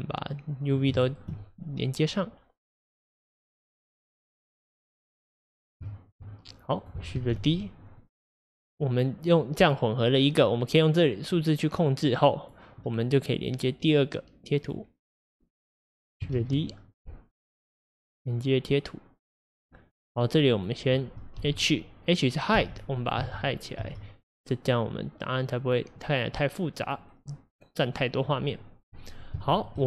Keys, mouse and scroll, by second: 0.7 click, 1.0-3.4 shift+middle drag, 3.4 click, 5.4 click, 6.7 click, 7.3 shift+d, 9.3-14.7 drag, 15.2 click, 16.3 shift+d, 18.3-19.6 drag, 20.6 click, 21.7 h, 22.3 click, 22.6 h, 23.0 drag, 23.2 h, 23.5 click, 23.8 h, 26.3 click, 27.4 click.